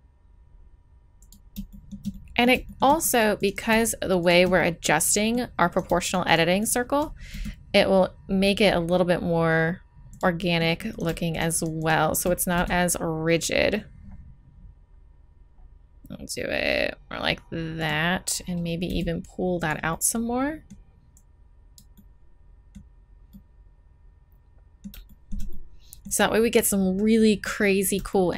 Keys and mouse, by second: 1.7-3.0 right drag, 3.4 right click, 4.3-7.1 middle drag, 7.1-8.5 drag, 7.3 s, 10.4 click, 10.9 right click, 12.5 s, 18.8 g, 19.9-21.1 drag.